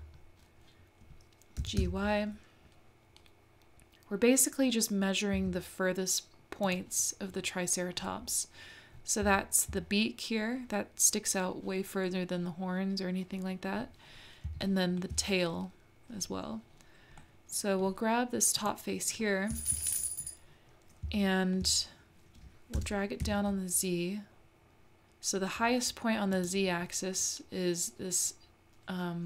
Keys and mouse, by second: 1.6 g, 9.4 shift+middle click, 14.6 shift+middle click, 17.2 middle click, 17.7 click, 17.7 right click, 18.6 click, 21.2 shift+middle click, 22.7 g.